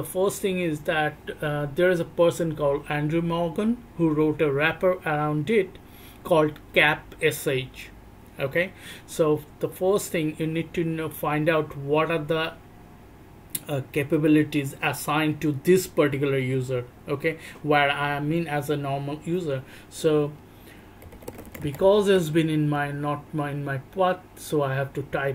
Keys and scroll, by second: 21.0 /, 21.1 /, 21.8 /.